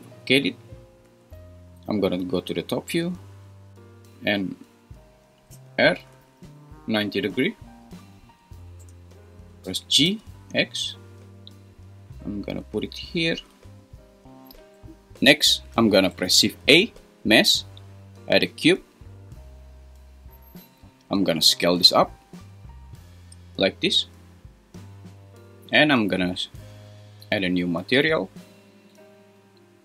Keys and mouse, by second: 0.1 Escape, 5.5 r, 6.1 9, 6.2 0, 8.8 Return, 9.6 g, 10.0 x, 13.3 g, 16.3 shift+a, 21.4 s.